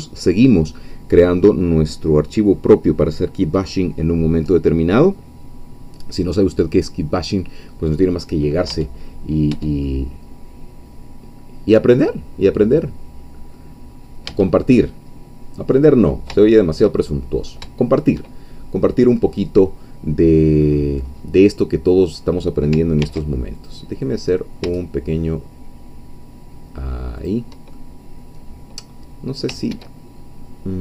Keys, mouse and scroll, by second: 8.7 Tab, 9.5 Tab, 9.8-13.7 middle drag, 13.9 scroll up 2, 14.3 Tab, 14.8 click, 15.3 middle click, 16.4-17.6 shift+middle drag, 20.6-21.3 scroll up 2, 21.3 scroll down 1, 23.0 ctrl+r, 23.6 ctrl+click, 27.2 shift+click, 27.7-29.0 shift+middle drag, 29.7 ctrl+z.